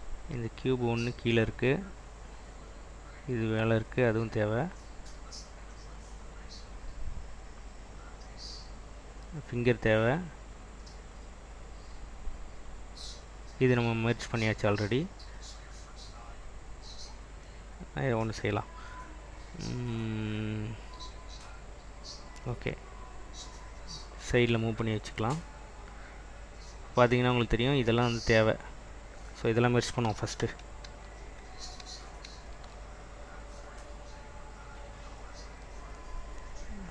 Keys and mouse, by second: 0.3 click, 0.9 click, 2.4 click, 3.0 click, 4.5 click, 5.2 click, 9.4 click, 11.2 click, 14.7 click, 16.3 click, 22.3 click, 28.3 click, 29.1 click, 30.5 ctrl+z, 31.0 ctrl+z, 31.6 ctrl+z, 31.9 ctrl+z, 32.4 ctrl+z, 34.6 click, 35.4 click, 36.3-36.9 drag.